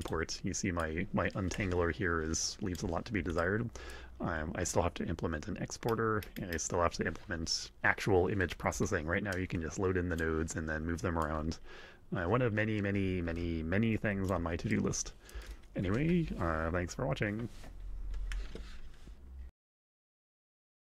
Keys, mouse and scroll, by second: 0.0 click, 0.7-2.9 drag, 3.3 click, 9.3-10.3 drag, 11.2-14.5 drag, 14.7 click.